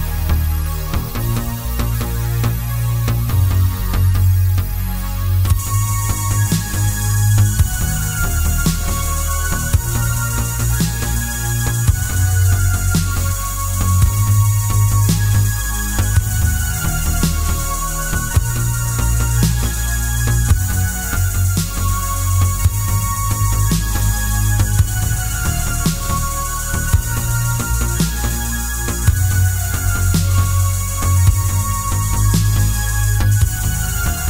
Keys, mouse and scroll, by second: 1.7 KP_7, 2.3 shift+z, 3.0 shift+d, 5.0 click, 5.8 click, 6.7 shift+click, 7.5 shift+d, 9.9 click, 10.1 KP_3, 11.5-12.6 middle drag, 12.9 click, 13.8 r, 16.4 KP_Enter, 16.8 g, 17.6 click, 17.7-21.8 middle drag, 18.0 shift+z, 19.0 r, 21.8 click, 22.0 middle click, 22.6 click, 23.3 Delete, 23.6 click, 24.0 shift+d, 25.9 click, 26.0-29.2 middle drag, 26.4 scroll down 1, 29.2 click, 30.0 KP_7, 30.5 z, 31.1 shift+d, 32.2 click, 32.8 s, 33.7 click, 34.0 s.